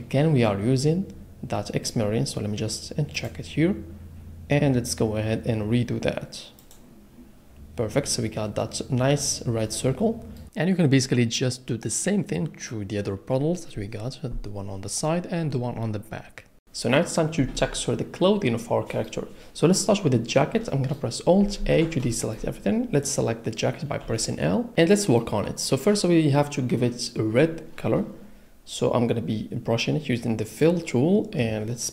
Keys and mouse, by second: 3.1 click, 10.8 click, 11.1 f, 11.7 click, 13.5 middle click, 14.9 click, 15.6 f, 15.9 click, 16.3 f, 16.5 click, 18.6 middle click, 21.6 alt+a, 24.0 l, 30.5 click.